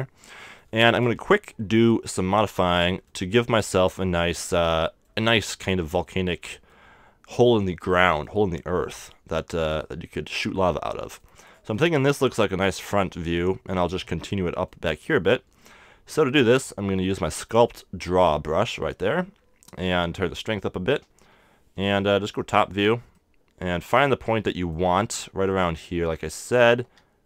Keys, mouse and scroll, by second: 0.2-10.9 middle drag, 11.7-17.5 middle drag, 17.5-20.6 drag, 20.9-22.6 middle drag, 22.3 KP_7, 23.0 scroll down 1, 23.2 middle click, 24.8 middle click, 26.8 KP_1.